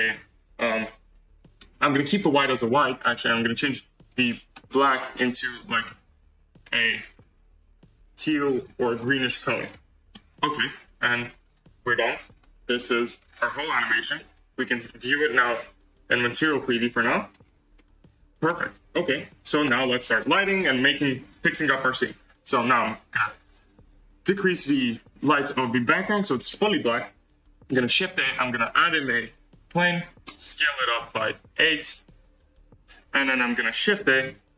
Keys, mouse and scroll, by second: 2.7-4.6 drag, 9.5-10.1 scroll down 4, 10.1 middle click, 10.4-10.8 scroll down 1, 10.8 space, 12.2-13.2 drag, 13.2-13.8 scroll down 2, 13.8 z, 14.5-15.5 scroll down 2, 15.5 space, 16.1 z, 16.6 scroll up 1, 16.8 space, 16.9-17.3 middle drag, 17.3-17.6 scroll down 7, 17.7 middle click, 18.4 c, 19.5 space, 19.9-20.5 middle drag, 20.5-21.0 scroll up 3, 21.5-22.1 scroll down 4, 24.9 click, 25.8 z, 26.1-26.4 scroll up 2, 26.4-29.7 middle drag, 29.7 shift+a, 31.0 s.